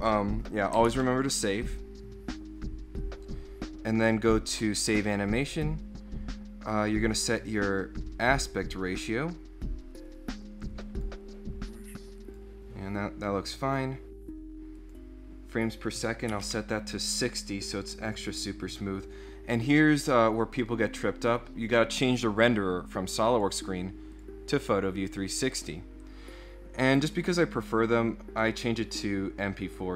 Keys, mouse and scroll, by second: 0.9 ctrl+s, 4.7 click, 7.1 click, 7.6 click, 8.3 click, 9.0 click, 10.7 click, 12.2 click, 13.6 click, 14.8 click, 17.7 click, 23.3 click, 24.1 click, 27.1 click, 28.4 click.